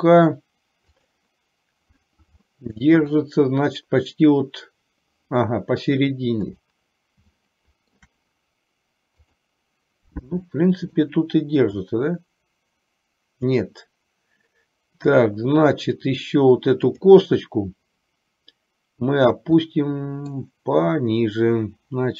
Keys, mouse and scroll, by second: 1.3 click, 2.5 shift+middle click, 6.8 click, 7.5 shift+middle click, 9.3 click, 10.4 middle click, 12.1-13.8 drag, 19.8 middle click.